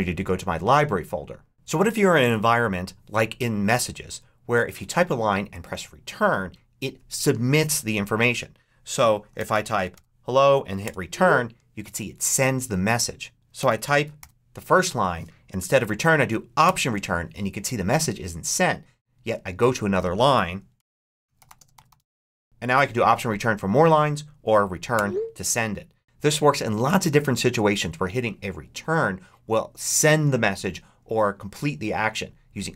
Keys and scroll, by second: 9.0-10.3 typing, 10.7 Return, 13.2-14.6 typing, 16.5 alt+Return, 20.4-22.4 typing, 24.8 Return.